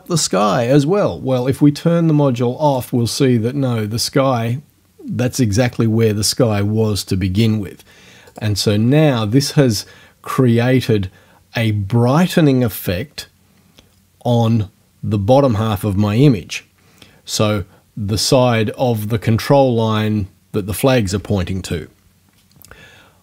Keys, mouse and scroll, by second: 2.7 click, 8.3 click.